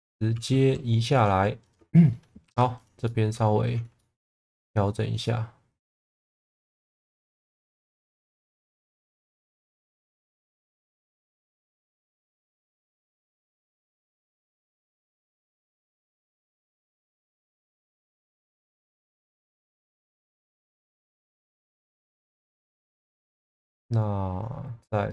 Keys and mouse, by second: 0.3 g, 0.5 b, 1.2 click, 2.4 2, 2.7 click, 3.0 alt+middle click, 3.9 shift+middle click, 5.2 click, 6.1 ctrl+z, 7.7 g, 8.0 a, 8.9 z, 9.9 click, 10.5-12.9 middle drag, 13.1 shift+middle click, 14.0 shift+middle click, 14.4-16.3 middle drag, 16.6 2, 17.2 middle click, 18.8 alt+middle click, 22.0 middle click, 23.0-25.1 middle drag.